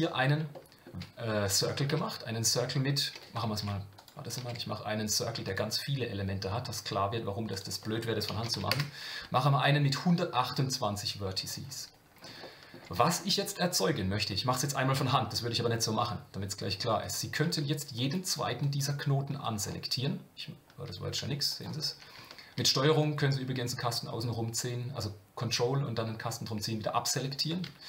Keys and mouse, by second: 0.5-0.8 shift+middle drag, 1.9 Tab, 3.6 x, 4.6 shift+a, 7.5-9.4 drag, 12.4 shift+middle click, 17.1 click, 18.1 shift+click, 18.7 shift+click, 19.5 shift+click, 21.5 ctrl+click, 23.0-26.6 ctrl+drag.